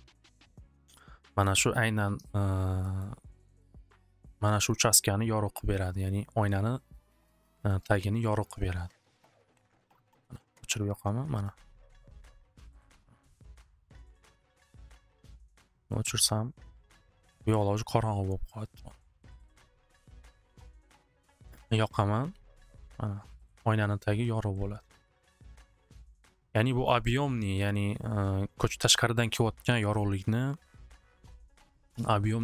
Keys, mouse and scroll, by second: 1.4 click, 3.1 middle click, 4.7 middle click, 5.4 middle click, 6.2 scroll, 7.1-7.9 scroll, 8.0 middle click, 10.3 click, 10.9 click, 11.4 click, 11.7 click, 12.1 click, 12.4 click, 13.9 click, 17.9-19.1 drag, 21.9 click, 23.0-27.0 drag.